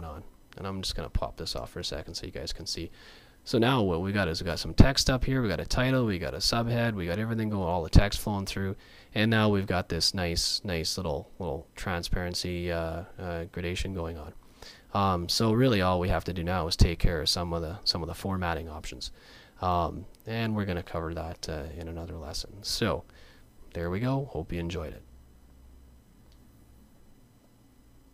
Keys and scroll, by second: 18.1 super+z.